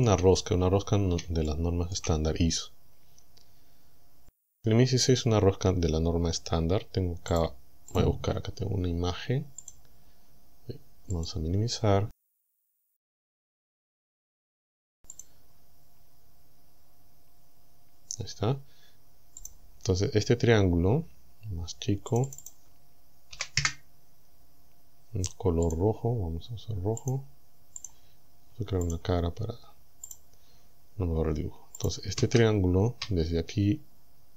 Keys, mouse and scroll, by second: 0.6 scroll up 2, 1.5 shift+middle click, 2.4-2.8 shift+scroll up 3, 5.0-5.4 scroll up 2, 5.4-5.7 scroll down 2, 7.4 click, 8.0 click, 9.7 click, 11.2 click, 13.2 right click, 15.2 click, 19.4 click, 22.2 click, 23.4 KP_2, 23.6 KP_Enter, 25.7 click, 27.0 click, 27.8 click, 28.9 click, 30.1 click, 31.8 click.